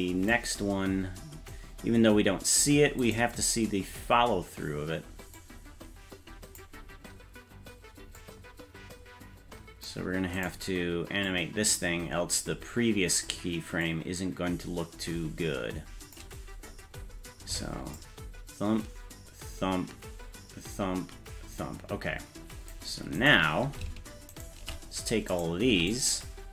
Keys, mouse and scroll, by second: 0.6 scroll down 4, 3.1 right click, 5.3-6.6 drag, 8.2-9.9 drag, 10.4 right click, 11.3-12.4 drag, 13.8-16.2 drag, 16.7-17.4 scroll up 5, 18.0-22.7 drag, 23.2 right click, 24.4 shift+right click, 25.3 right click, 25.7 c.